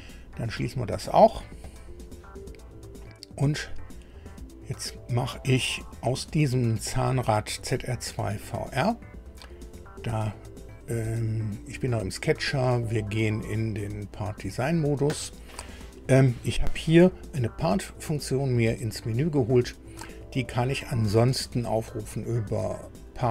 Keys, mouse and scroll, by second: 1.6 click, 2.6 scroll down 2, 3.2 scroll up 2, 4.1-4.5 scroll up 2, 4.9 scroll down 2, 8.2 click, 11.7 click, 14.1 click, 21.6 click, 22.7 click.